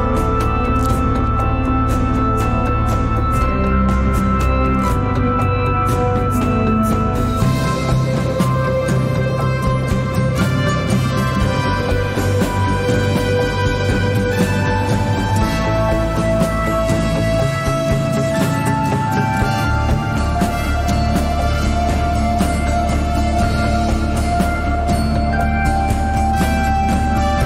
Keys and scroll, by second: 8.0 Tab, 10.1 3, 16.4 alt+e.